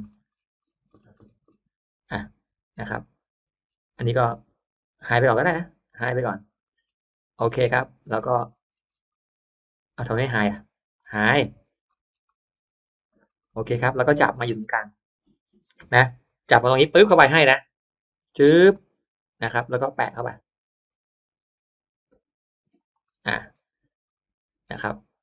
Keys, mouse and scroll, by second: 1.1-1.6 scroll up 2, 2.7-3.1 scroll up 2, 2.8 middle click, 4.8 right click, 5.9 click, 6.5 middle click, 6.7 scroll up 1, 7.0 click, 7.4-8.1 scroll down 2, 8.4-9.2 scroll up 1, 9.0 middle click, 9.2 scroll down 1, 9.8 right click, 10.9 click, 11.3-11.7 middle drag, 11.5 click, 11.8 middle click, 12.1-12.5 scroll up 1, 12.3 space, 12.5-13.0 drag, 13.3 middle click, 13.3-14.3 scroll up 2, 14.5 middle click, 15.8 middle click, 16.3 middle click, 16.8 m, 17.5 click, 18.9 shift+middle click, 19.5 shift+middle click, 19.9 shift+scroll up 2, 22.7 shift+click, 22.9-24.1 scroll down 3, 24.0-25.2 middle drag.